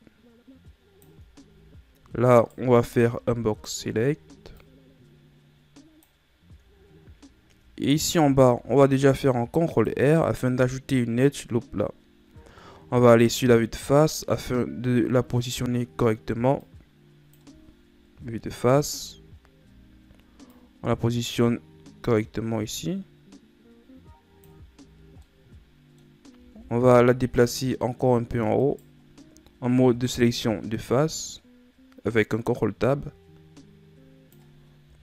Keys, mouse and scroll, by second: 1.7-2.6 scroll up 1, 2.6 right click, 3.0 b, 4.8-7.0 drag, 7.0-8.4 scroll up 2, 8.4 ctrl+r, 12.8 middle click, 13.6 z, 16.9-18.4 drag, 18.4 KP_1, 19.6 scroll up 1, 20.7-23.9 drag, 25.5-26.8 middle drag, 26.8 ctrl+Tab, 28.9-30.4 right drag, 30.4-33.4 drag.